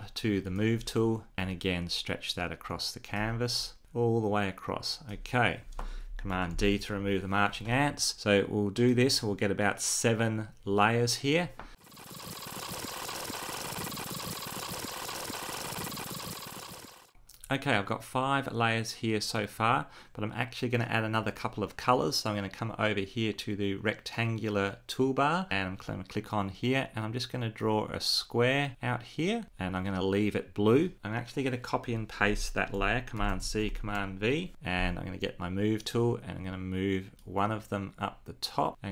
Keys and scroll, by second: 6.3 super+d, 32.8 super+c, 34.0 super+v.